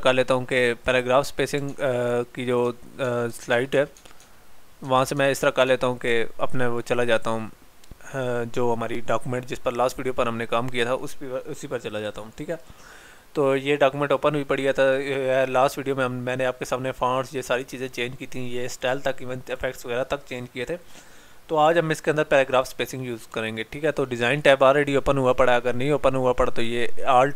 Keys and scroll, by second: 1.7 alt+Tab.